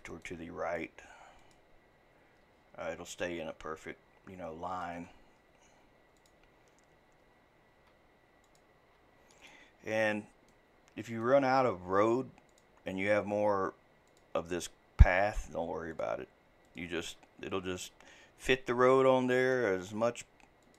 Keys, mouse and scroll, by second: 1.4 click, 2.5-3.1 scroll down 4, 3.1-6.2 shift+middle drag, 6.2 click, 7.8 e, 8.8 e, 9.8-10.2 scroll down 7, 10.5-11.7 shift+middle drag, 11.7 e, 12.8 e, 15.3 e, 16.1 e, 17.8-18.8 shift+middle drag, 18.8 e, 19.7 e.